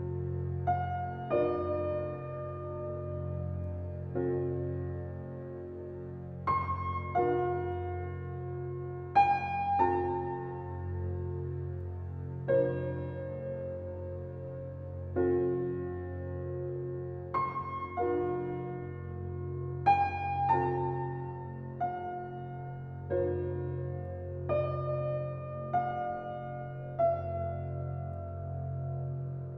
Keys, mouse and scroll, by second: 1.6 click, 2.6 click, 3.8 click, 6.3-8.7 drag, 9.1 g, 12.3 click, 12.5 scroll up 1, 12.8-14.1 middle drag, 14.1-14.5 scroll up 2, 14.5-14.9 shift+middle drag, 14.9 scroll down 1, 15.1-16.6 middle drag, 16.8 alt+middle click, 17.2-17.5 scroll down 1, 17.5 shift+a, 21.0 Tab, 21.7 g, 23.9 scroll down 1, 23.9 alt+middle click, 25.4 g, 28.8 g.